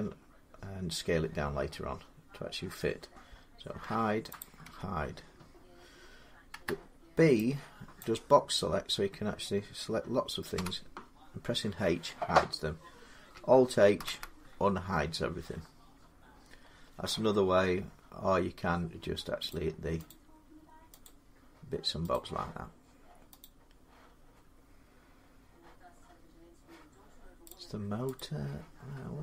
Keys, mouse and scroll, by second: 3.6 h, 4.2 click, 4.5 h, 6.3 b, 7.8 click, 9.5-12.9 drag, 10.3 h, 13.8 alt+h, 19.3 click, 19.9 click, 20.9 click, 21.9 click, 23.2 click, 25.6-26.0 scroll, 27.3 click, 28.0 click, 28.9-29.2 scroll down 4.